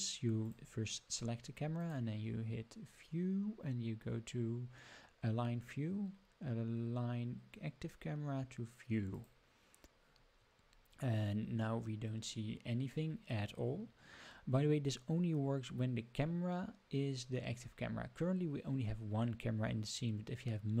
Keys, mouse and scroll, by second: 0.4 click, 1.7-9.2 drag, 10.7-11.3 scroll up 3, 11.3-11.7 scroll down 2, 12.0-12.7 scroll up 2.